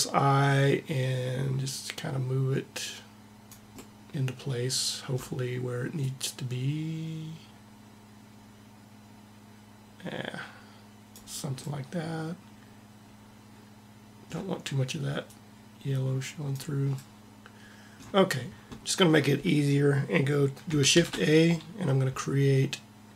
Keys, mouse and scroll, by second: 3.6-5.1 middle drag, 5.8 click, 15.1-16.4 drag, 20.8 shift+a.